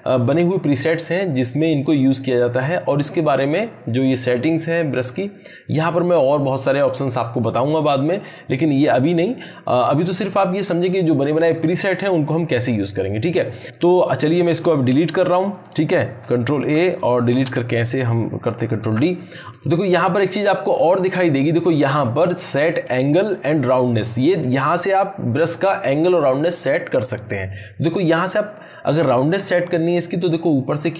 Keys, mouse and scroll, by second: 5.1 click, 9.4 click, 13.6 click, 16.5 ctrl+a, 18.8 ctrl+d, 19.5 click, 30.3-30.9 drag.